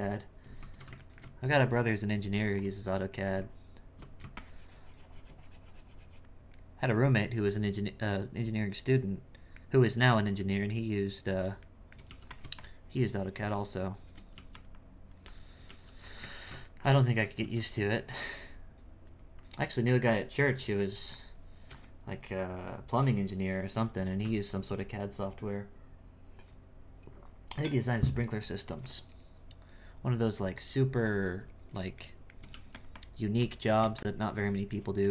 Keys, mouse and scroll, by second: 2.6 click, 3.4 Tab, 4.3-6.5 shift+drag, 6.5-12.1 shift+middle drag, 12.6-14.3 shift+drag, 14.7 click, 16.4 ctrl+shift+middle click, 17.9-20.2 drag, 20.2-24.1 shift+middle drag, 32.1 shift+middle click, 32.9-35.1 drag.